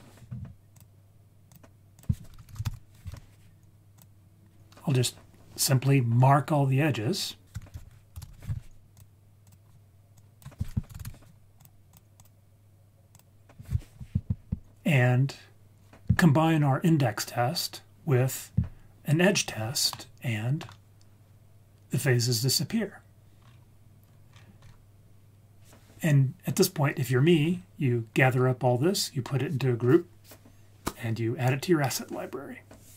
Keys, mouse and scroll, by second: 0.7-1.5 drag, 1.9-3.1 drag, 3.9-6.3 drag, 7.4 ctrl+shift+z, 7.5 shift+a, 8.3 o, 10.1-11.6 drag, 12.2-13.2 drag, 19.9-21.2 middle drag, 23.4-24.4 scroll down 4, 24.3-25.1 scroll up 4, 27.4-31.3 scroll down 4.